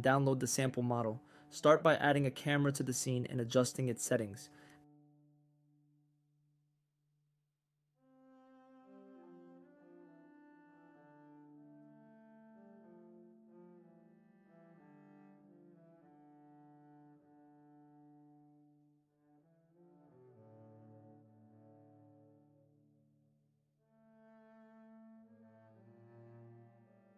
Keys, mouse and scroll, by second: 4.1-4.9 drag, 6.1-7.2 drag, 8.6 click, 9.5-11.9 drag, 16.2-18.1 drag, 19.4 drag, 20.3-23.0 drag, 23.9 shift+click.